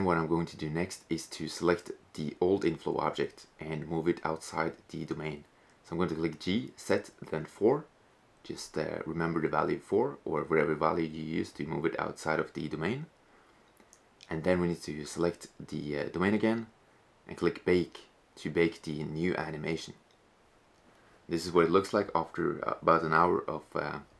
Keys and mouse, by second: 2.6-4.4 right drag, 3.5 g, 8.6 right click, 12.1 right click.